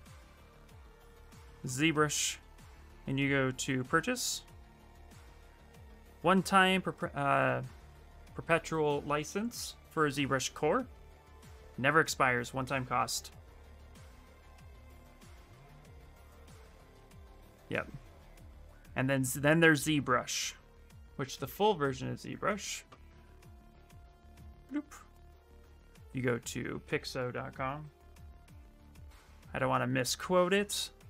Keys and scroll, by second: 22.1 alt+Tab, 27.2-28.4 typing, 28.5 Return.